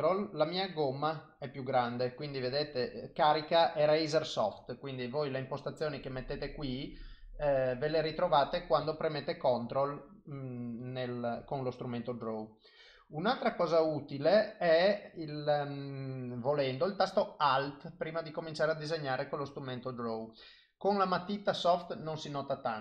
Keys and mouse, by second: 3.8 ctrl+click, 5.4 click, 8.3 click, 9.0 ctrl+click, 9.2 ctrl+click, 9.4 click, 10.5 click, 10.8 click, 11.3 click, 11.7 click, 12.0 click, 12.3 ctrl+click, 13.2 click, 13.6 click, 15.5 click, 18.1 alt+click, 22.0 click.